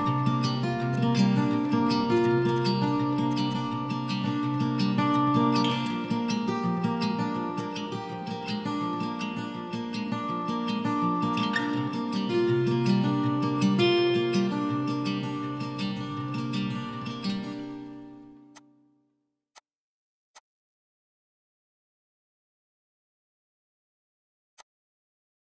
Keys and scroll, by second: 0.3 Delete, 1.1 Delete, 4.7 f, 5.9-6.4 typing, 7.2 ctrl+z, 8.3-9.0 typing, 9.5 ctrl+z, 14.1-15.0 typing, 15.7 ctrl+z, 19.2 ctrl+z, 19.9 ctrl+z, 25.1 ctrl+z.